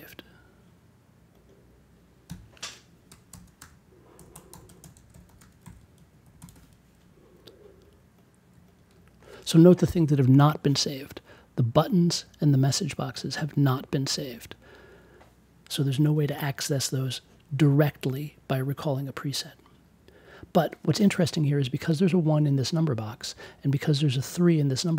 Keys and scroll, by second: 2.2 c, 3.2-6.1 typing.